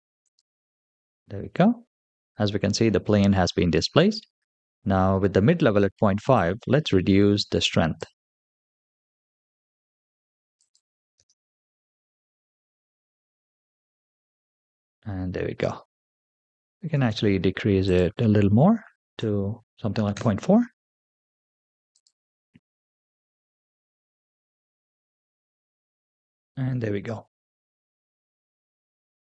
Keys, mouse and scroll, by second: 1.7-5.6 scroll down 5, 6.2-8.0 drag, 10.4 click, 11.0 space, 16.8 space, 17.7-20.0 drag, 21.8 click, 23.2 space.